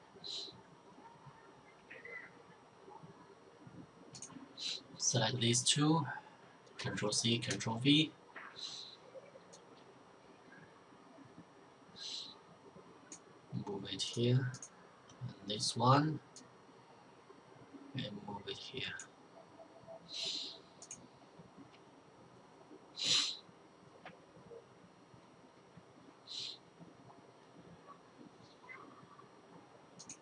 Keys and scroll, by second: 6.0 ctrl+c, 6.7 ctrl+v.